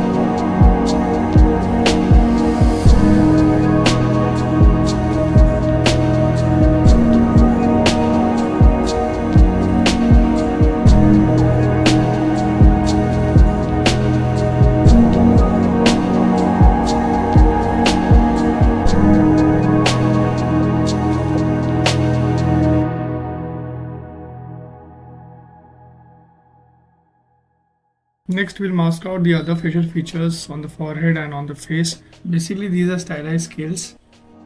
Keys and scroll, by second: 18.8 ctrl+alt+s, 21.6 s, 22.2 ctrl+s, 30.5 ctrl+z, 32.1 z.